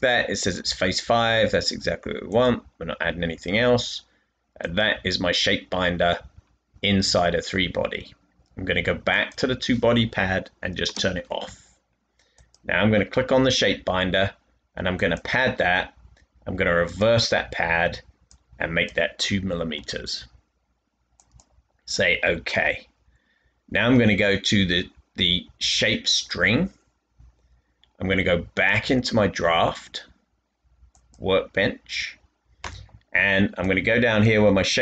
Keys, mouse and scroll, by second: 11.8 space, 19.7 space, 24.2 typing.